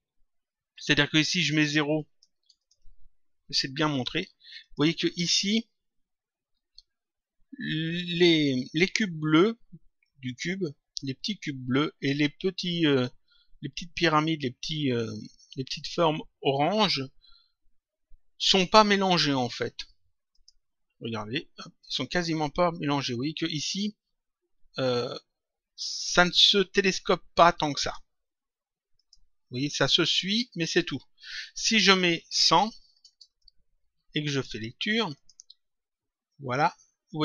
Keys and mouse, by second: 1.9 click, 3.9 click, 20.3 click, 21.8 click, 27.7 click, 28.9 click, 30.1 click, 32.1 click, 33.2 click.